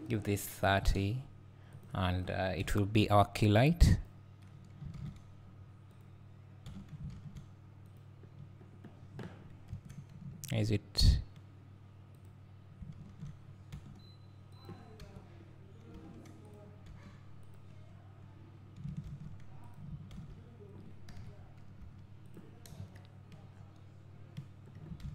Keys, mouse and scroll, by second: 1.7-2.3 drag, 2.6 KP_7, 3.9 click, 5.0 alt+r, 6.0-8.3 drag, 7.1 r, 9.7 KP_1, 11.0 click, 13.2 alt+r, 14.6 click, 15.0 KP_7, 15.9 r, 16.5 click, 16.9 g, 17.5 click, 19.1 shift+d, 19.7 click, 20.1 alt+r, 21.2 KP_3, 21.8 r, 22.3 click, 22.7 KP_0, 23.5-24.2 scroll down 2, 24.2-25.1 scroll up 2.